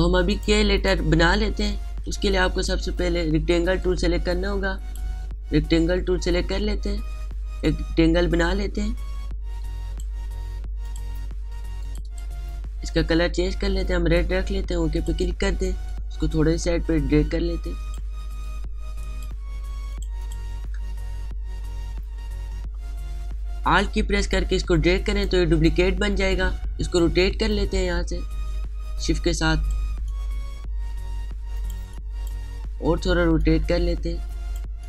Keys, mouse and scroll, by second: 2.1-2.6 alt+scroll up 1, 2.8 space, 2.9 click, 3.3 space, 4.5 right click, 5.4 click, 7.7-20.5 drag, 24.6-27.6 alt+drag, 27.6-32.4 drag, 32.4 space, 32.6 click, 32.9 space, 34.0-34.8 drag.